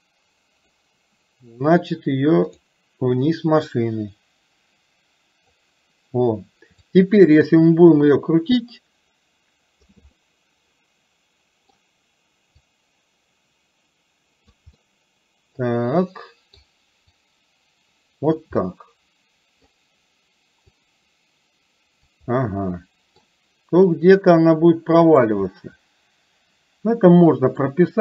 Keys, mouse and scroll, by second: 3.7-5.7 drag, 8.2-10.0 drag, 10.2-11.8 middle drag, 12.7-14.7 drag, 14.8-16.7 middle drag, 17.3-18.5 drag, 18.8 middle click, 20.9-22.2 drag, 22.4 middle click, 24.3-25.3 drag, 25.5-27.7 middle drag.